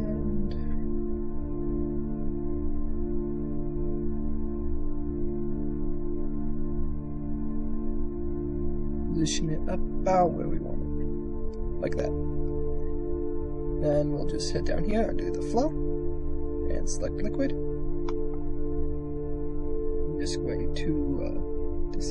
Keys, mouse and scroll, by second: 0.6 shift+middle click, 1.1 s, 2.4-3.7 drag, 5.8 click, 6.7 g, 8.8 s, 11.2 click, 12.2 middle click, 15.4-17.3 drag, 17.8 middle click, 19.4 middle click, 22.0 click.